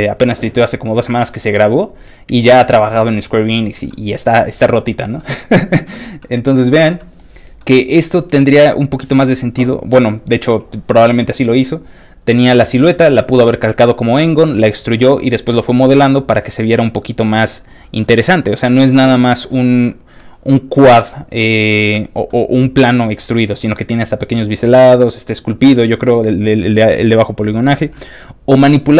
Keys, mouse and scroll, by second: 1.7 click, 3.9 middle click, 4.6 middle click, 5.5 middle click, 6.2 middle click, 7.0 middle click, 10.0 middle click, 15.9-17.2 scroll down 3, 17.4 middle click, 18.5 middle click, 19.8 middle click, 21.9 middle click, 23.3 middle click, 25.9-26.3 scroll down 1, 26.8-27.3 scroll down 2, 27.9 middle click.